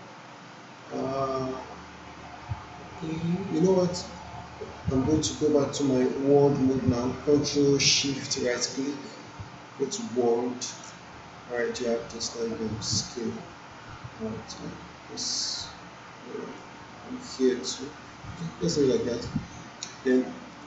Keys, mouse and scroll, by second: 5.6 ctrl+Num_Lock, 5.6 click, 8.5-10.9 ctrl+shift+right drag, 13.3-16.7 drag, 20.5 click.